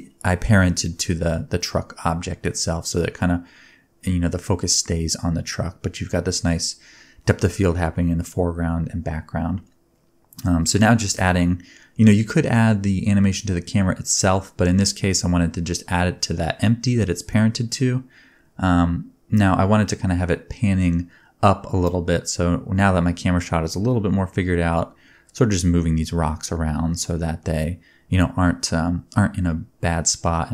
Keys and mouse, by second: 1.5-5.2 drag, 3.8-5.2 middle drag, 3.8-5.2 right drag, 5.6 shift+click, 5.7 middle click, 5.9 click, 6.4 middle click, 6.5 shift+click, 7.2 middle click, 7.4-10.7 drag, 8.6-14.1 middle drag, 8.6-10.7 right drag, 14.5 s, 14.9 g, 15.1-17.3 drag, 17.3 middle click, 17.3 click, 17.5 middle click, 17.6-30.5 drag, 17.9 g, 19.1-22.4 typing, 24.6 middle click, 24.6 right click, 24.9 s, 25.4 g, 26.6 r, 29.3 a, 29.5 t, 30.3 space.